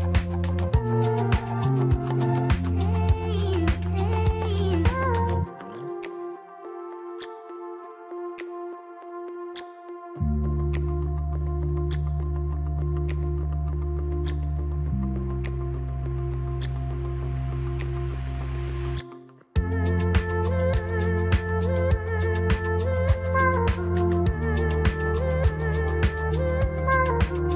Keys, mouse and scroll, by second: 6.6 click, 8.1 shift+d, 17.0 shift+d, 21.2-22.1 scroll down 1, 22.1 click, 22.5-23.0 scroll down 2, 23.0-25.2 middle drag, 25.2-25.8 scroll up 7, 26.6-27.5 middle drag.